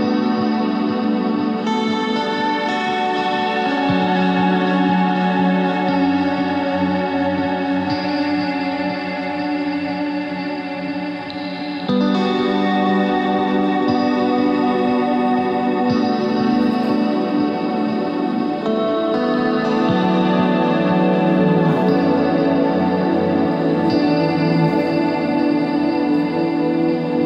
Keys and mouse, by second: 2.3 e, 3.8 click, 4.5 Tab, 7.3 middle click, 7.5 Tab, 8.3 ctrl+Tab, 12.7 g, 16.7 g, 20.2 middle click, 20.6 Tab, 22.7 middle click, 24.2-25.8 middle drag, 25.8 KP_1.